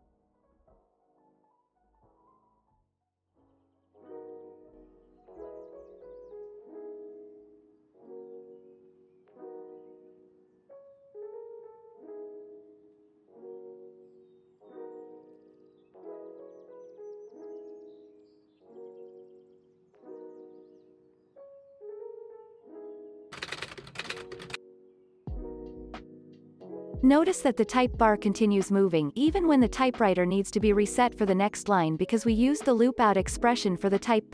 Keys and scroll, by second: 0.3 ctrl+v, 3.7 ctrl+v, 6.3 x, 7.2 ctrl+v, 19.7 space, 25.3 space, 25.8 ctrl+s, 27.0 space, 27.8 v.